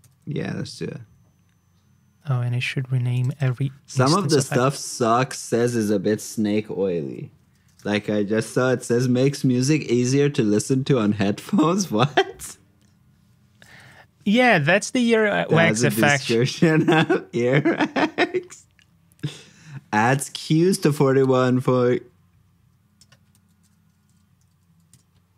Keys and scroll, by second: 0.0 super+v, 3.8 super+d, 13.8 super+Tab, 19.2 super+Tab, 23.3 super+c, 23.9 super+j.